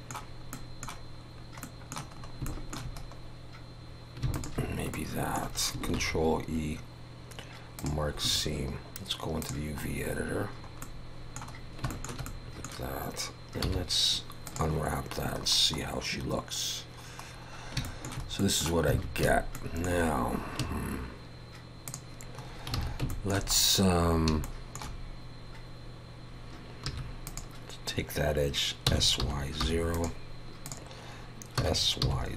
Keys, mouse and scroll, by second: 0.5 middle click, 1.6 middle click, 2.2-2.5 scroll up 2, 2.5 shift+middle click, 3.0 scroll up 2, 4.3 alt+shift+click, 4.9 middle click, 5.9 ctrl+e, 8.2 a.